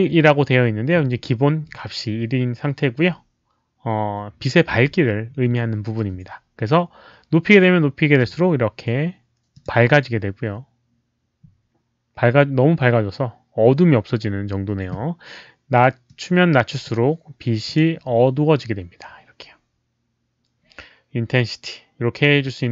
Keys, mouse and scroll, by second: 8.1 click, 9.5 click, 16.0 click, 17.6 click.